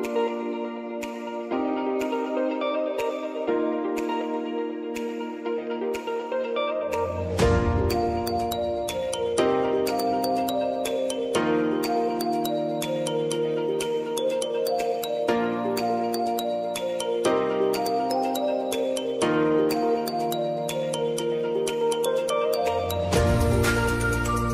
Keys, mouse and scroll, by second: 0.4 ctrl+y, 1.6-4.4 drag, 4.4 Return, 6.3-17.0 drag, 23.3 Return.